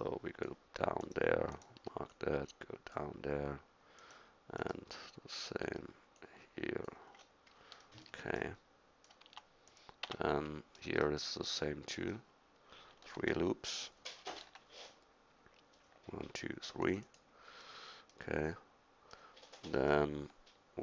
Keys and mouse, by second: 2.0 middle click, 4.0-6.2 middle drag, 7.2 middle click, 8.6 middle click, 9.3 Tab, 10.1 Tab, 14.3 ctrl+r.